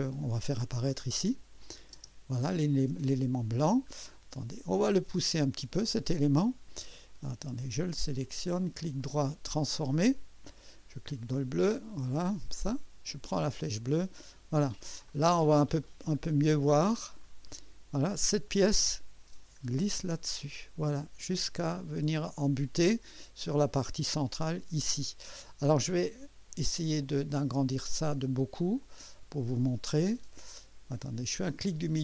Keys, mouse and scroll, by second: 0.0-0.3 scroll down 1, 1.6 click, 1.9 space, 2.9 click, 3.6-3.9 scroll down 1, 4.1 click, 8.1 click, 8.6 right click, 9.6 click, 10.3 scroll down 2, 11.1 click, 11.5-12.8 right drag, 13.5-15.0 drag, 15.9 click, 16.1 scroll up 2, 17.2 right click, 18.6-24.2 drag, 27.0-28.8 drag, 28.8-29.6 scroll up 3, 29.8 right click.